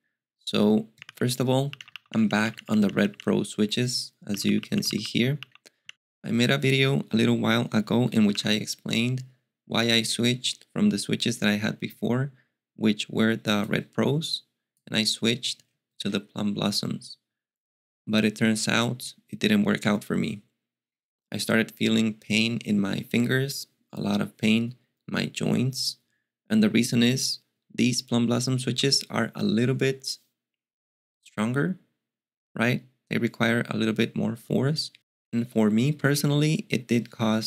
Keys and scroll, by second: 1.0 alt+x, 1.4-6.3 typing, 7.8-8.8 typing.